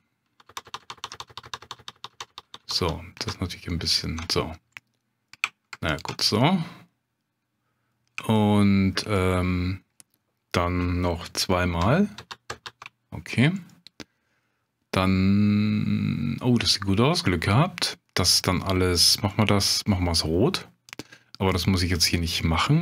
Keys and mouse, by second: 0.3 ctrl+KP_Add, 4.2 ctrl+KP_Add, 4.8 click, 6.3-7.9 drag, 8.3 shift+click, 9.1 click, 12.2 ctrl+KP_Add, 12.5 ctrl+KP_Add, 13.7-17.1 drag, 17.3 middle click, 20.9 click, 22.1-22.8 drag.